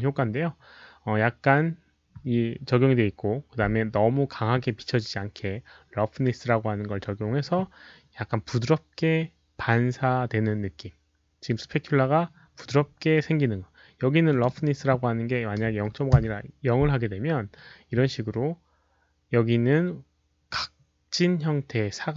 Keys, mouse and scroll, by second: 14.2 click, 15.6 click, 15.6 KP_0, 16.1 Return.